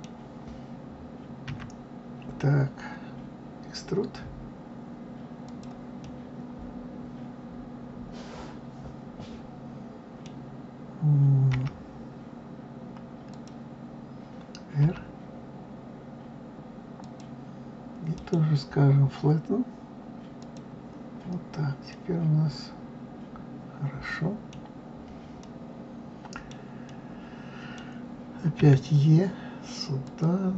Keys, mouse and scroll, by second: 1.5 e, 6.0-9.0 middle drag, 11.5 g, 14.8 r, 18.1-21.3 right drag, 21.3-21.9 scroll up 2, 21.9-24.6 middle drag, 24.6-25.4 scroll down 4, 25.4-28.6 middle drag, 28.6 e.